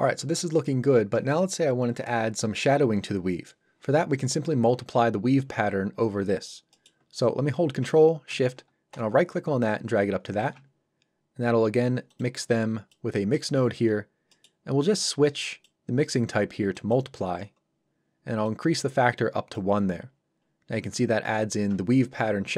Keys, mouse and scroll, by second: 6.7 middle click, 8.9 ctrl+shift+right click, 12.1 shift+click, 13.9-14.3 scroll up 1, 14.3 middle click, 15.5 click, 20.1 scroll up 1.